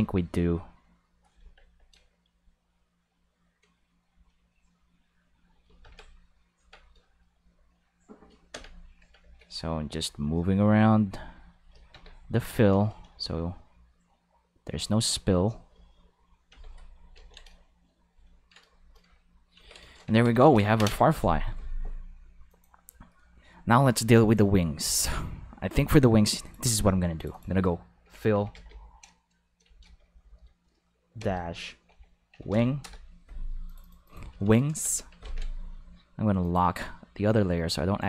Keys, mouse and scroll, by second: 1.4 Tab, 2.0 right click, 2.2 g, 3.3 click, 3.8 right click, 4.1 g, 5.2 click, 5.8 Tab, 6.6 Tab, 6.8 right click, 7.3 g, 8.2 click, 8.5 Tab, 9.3 right click, 9.9 g, 10.6 click, 11.0 r, 11.5 click, 11.9 Tab, 12.3 Tab, 12.6 right click, 13.0 g, 14.5 click, 14.7 r, 15.3 click, 15.7 g, 16.2 click, 16.5 Tab, 17.1 ctrl+s, 17.6 shift+middle click, 18.3 ctrl+middle click, 18.8 shift+middle click, 19.1 ctrl+middle click, 20.4 ctrl+s, 22.5 click, 24.2 click, 26.4 click, 27.2 click, 27.3 click, 28.0 shift+f, 28.3 shift+i, 28.5 l, 29.4 Left, 29.6 Left, 30.0-32.5 typing, 32.8 Return, 33.6 click, 33.8 click, 34.0 click, 34.3 shift+s, 34.7 Return, 35.2 ctrl+s, 36.4 click.